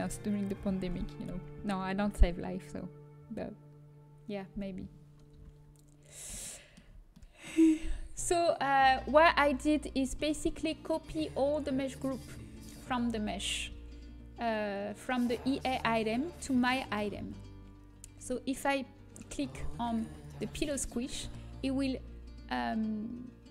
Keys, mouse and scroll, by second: 5.2-10.9 middle drag, 16.5-18.8 middle drag, 18.8-19.9 drag, 20.6 click.